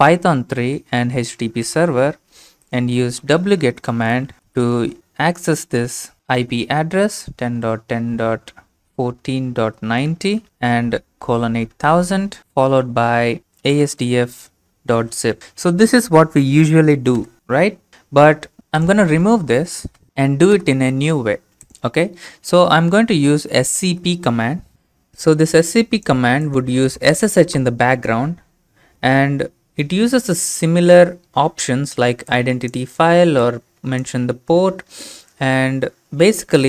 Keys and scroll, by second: 0.0-0.3 typing, 0.6 Right, 1.7 Return, 3.0-15.9 typing, 17.2 Return, 18.6 ctrl+c, 19.6-20.5 typing, 20.6 Return, 23.1-24.4 typing.